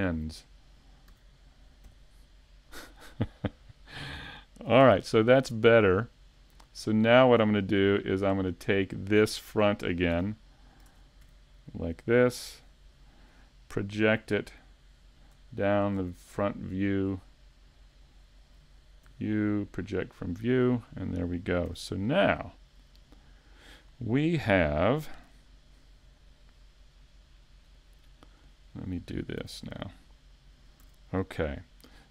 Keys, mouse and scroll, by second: 7.6 scroll up 3, 8.0 shift+middle click, 8.5-9.0 scroll down 2, 8.9 middle click, 10.1 a, 10.9 ctrl+Tab, 15.5 shift+middle click, 15.5 scroll down 1, 16.7-17.0 scroll up 1, 17.3 shift+middle click, 19.1 u, 23.8 scroll down 2, 29.4 a.